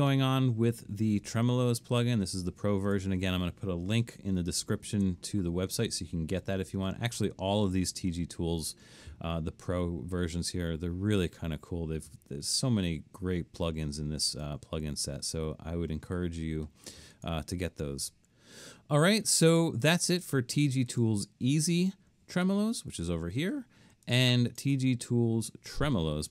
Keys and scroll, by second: 4.3 super+-, 4.9 super+-.